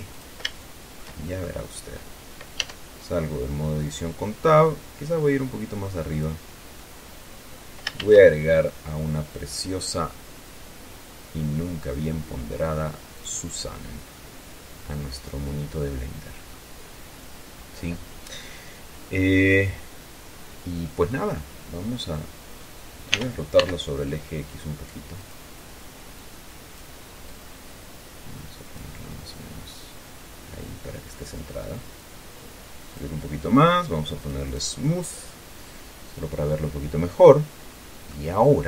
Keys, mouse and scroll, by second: 0.5 click, 1.0 shift+middle click, 3.0 Tab, 4.1-6.8 drag, 7.1-8.7 middle drag, 8.3 shift+a, 13.5 click, 14.5-17.0 drag, 17.0 middle click, 17.2-18.0 scroll up 1, 19.5-21.6 drag, 22.4 click, 23.1 middle click, 23.5 r, 23.9 x, 25.4 middle click, 25.5 click, 25.8 middle click, 26.5 click, 27.6-31.6 drag, 32.3-33.5 drag, 34.5 click, 35.1 middle click, 36.0-38.6 middle drag.